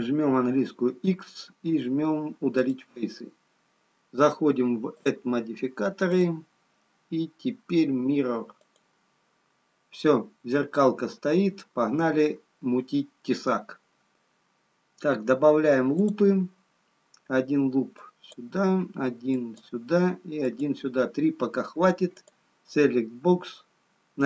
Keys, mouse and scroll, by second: 4.8 click, 6.2 click, 13.8 scroll up 2, 16.3 click, 18.0 click.